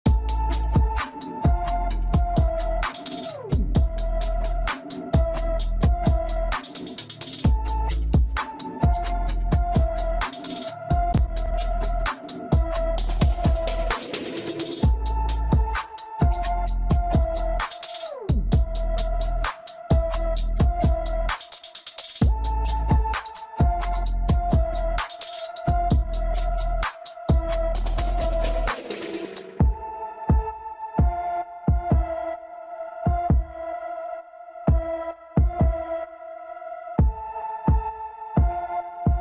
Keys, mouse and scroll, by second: 0.7 scroll up 1, 1.1 Tab, 1.4 Tab, 1.7 s, 2.5-2.9 scroll down 10, 2.9 s, 4.2 shift+a, 5.9 click, 6.7 click, 7.0-8.5 right drag, 8.5 r, 9.7-11.3 middle drag, 11.4 shift+a, 13.4 shift+z, 14.0-14.4 scroll down 2, 14.4 KP_1, 14.8 scroll up 1, 15.5 click, 16.2-18.2 right drag, 18.5 ctrl+z, 18.8 click, 19.3 click, 19.6 click, 20.5 drag, 20.7 click, 21.0-22.1 right drag, 22.1 s, 23.6 click, 24.1 Delete, 24.4 scroll down 1, 24.6-25.2 middle drag, 25.2-25.6 scroll up 2, 25.6-26.0 middle drag, 26.7-28.5 middle drag, 28.5 click, 29.9 shift+z, 30.4 click, 31.2 click, 32.4 shift+click, 32.8 shift+click, 34.0 shift+click, 34.6 shift+click, 36.8 ctrl+j, 38.8 click.